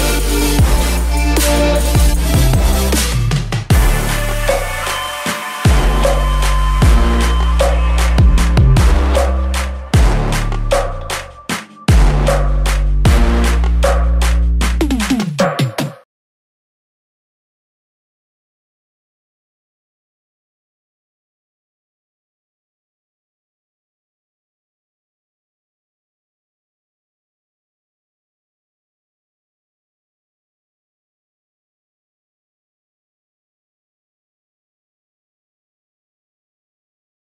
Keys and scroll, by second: 31.4 ctrl+i.